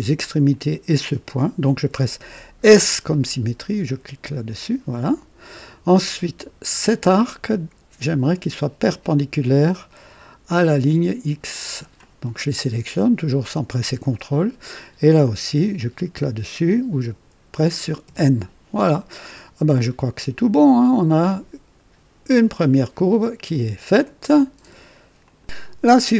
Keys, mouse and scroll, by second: 0.4 click, 3.8 s, 7.1 click, 11.7 click, 18.0 n, 25.2 click.